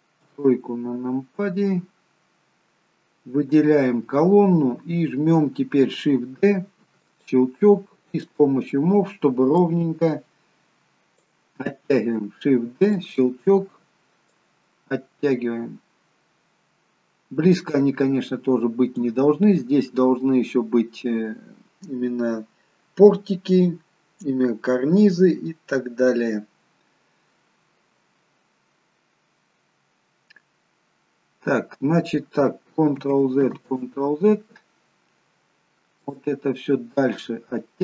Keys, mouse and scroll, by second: 0.2 KP_3, 1.8-2.5 scroll up 2, 3.2 scroll up 1, 3.4 click, 6.9 shift+d, 8.1 click, 9.6 click, 12.8 shift+d, 14.3 click, 33.0 ctrl+z, 33.6 ctrl+z, 36.0 click.